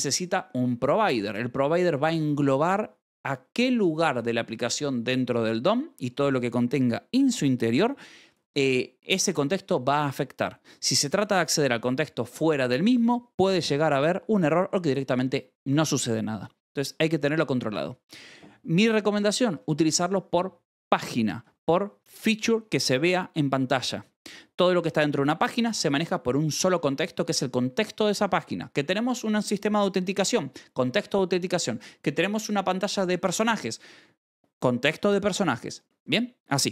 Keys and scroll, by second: 13.9 Escape, 14.3 j, 19.9 shift+v, 21.3 Escape.